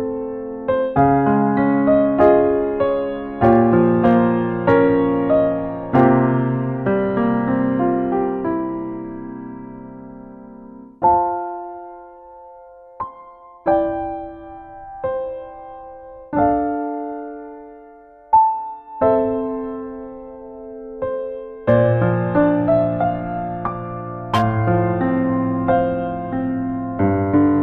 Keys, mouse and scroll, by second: 0.2 shift+middle click, 0.5 ctrl+right click, 0.9 shift+right click, 2.0 f, 2.2 click, 3.3 f, 3.7 click, 4.7 click, 6.0 f, 6.2 click, 8.0 ctrl+click, 8.3 click, 9.0 middle click, 9.5 shift+middle click, 9.7 middle click, 10.3 middle click, 10.7 ctrl+right click, 11.1 right click, 11.4 f, 11.7 click, 12.2-14.0 click, 14.9 click, 15.3 click, 16.0 middle click, 16.5 ctrl+middle click, 17.0 middle click, 17.4 shift+middle click, 17.7 middle click, 18.0 ctrl+middle click, 19.1 ctrl+right click, 20.0 click, 21.5 f, 22.2 click, 24.2 ctrl+middle click, 24.5 middle click, 25.0 shift+middle click, 25.9 middle click, 26.4 ctrl+middle click, 27.0 middle click.